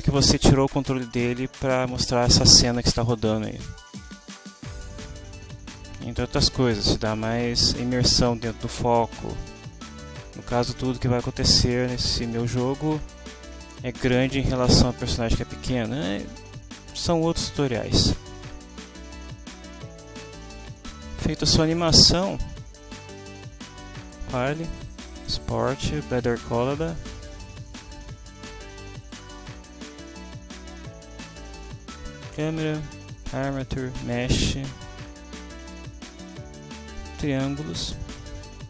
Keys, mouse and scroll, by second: 4.7-19.5 drag, 21.6 click, 24.0 click, 27.6 click, 29.0 click, 31.2 click, 33.2 shift+click, 34.0 shift+click, 37.5 click.